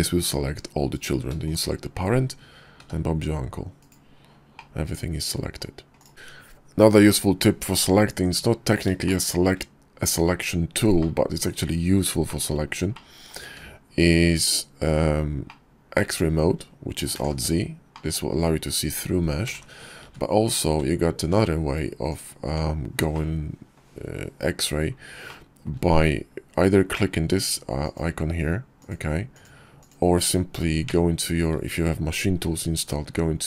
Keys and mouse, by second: 2.3 g, 4.1-5.1 drag, 5.5 click, 8.3 drag, 10.2-10.7 middle drag, 11.5 shift+middle drag, 12.1 middle drag, 12.3 click, 12.7 `, 13.5 KP_5, 14.7-15.7 drag, 16.4 alt+z, 18.7 alt+z, 19.2 `, 19.9 `, 20.4 `, 21.7 Tab, 22.4 click, 22.8 middle click, 23.3 KP_5, 24.5 click, 27.0 click, 28.0 click, 28.5 click, 29.0 click, 30.1 Tab.